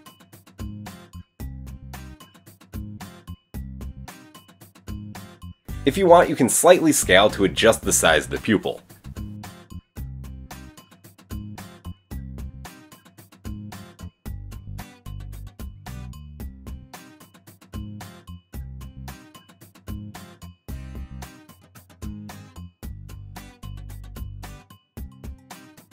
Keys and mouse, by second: 8.6 shift+middle click, 9.3-17.8 shift+drag, 19.1-21.3 drag.